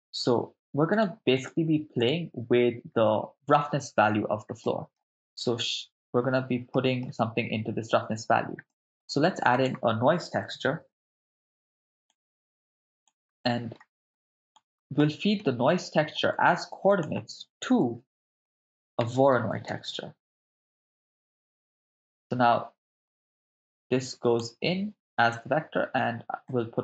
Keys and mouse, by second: 0.2 shift+a, 4.6 middle click, 5.3 shift+a, 6.7 middle click, 8.7 middle click, 9.3 shift+a, 13.4 middle click, 14.2-15.0 drag, 15.0 middle click, 16.6 shift+a, 17.0 click, 18.0 shift+a, 23.2-24.4 drag, 26.5-26.8 drag.